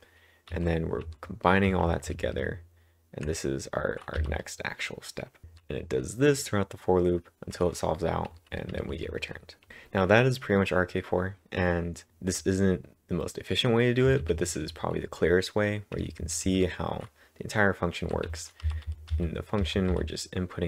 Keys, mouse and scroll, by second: 0.8-3.0 typing, 4.2 typing, 7.4-9.2 typing, 12.1 typing, 14.3-16.5 typing, 17.8-19.9 typing.